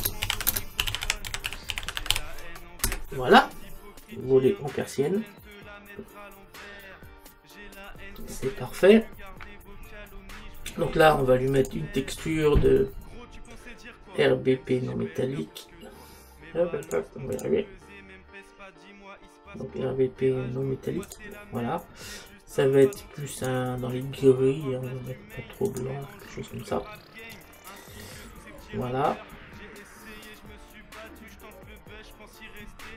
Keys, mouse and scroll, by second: 2.0 n, 11.6 click, 16.9 click.